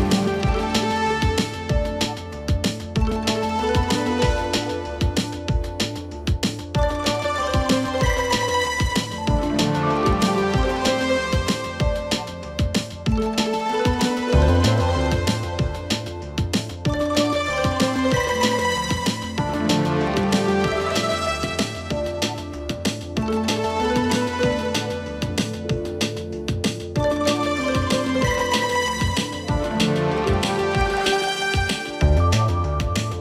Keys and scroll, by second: 2.3 ctrl+alt+g, 8.0 ctrl+t, 25.0 ctrl+alt+g.